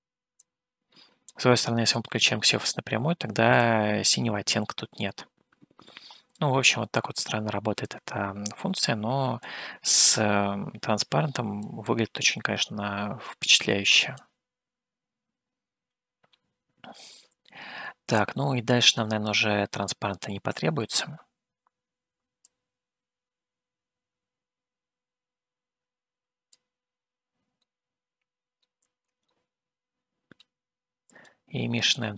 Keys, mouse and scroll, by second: 0.7-2.0 drag, 3.7-6.5 drag, 8.0-9.9 drag, 11.8-14.4 drag, 16.1-16.4 scroll down 2, 18.1-18.4 scroll down 1, 18.4-20.2 middle drag, 20.2-21.0 scroll up 2, 22.9-26.6 drag, 27.9-29.0 middle drag, 29.4-30.8 middle drag, 31.6 click.